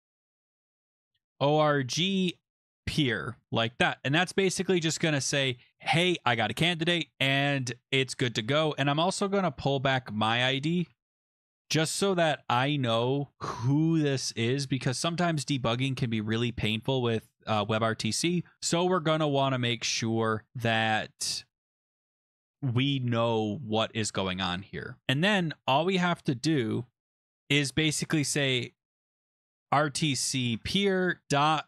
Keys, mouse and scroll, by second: 0.0-3.3 typing, 4.3 Escape, 4.8 Right, 5.7 Escape, 8.4 Left, 9.2 space, 10.5-13.6 typing, 13.9 Right, 14.6-17.2 typing, 18.3-22.4 typing, 25.0 Return, 25.0 click, 29.3-31.6 typing.